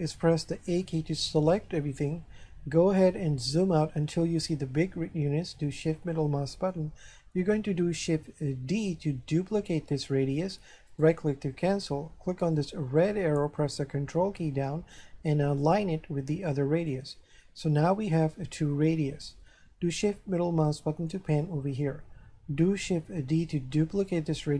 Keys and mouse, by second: 0.3 a, 5.8 shift+middle click, 8.6 shift+d, 10.9 right click, 12.6 click, 13.6 ctrl+click, 20.2 shift+middle click, 23.3 shift+d.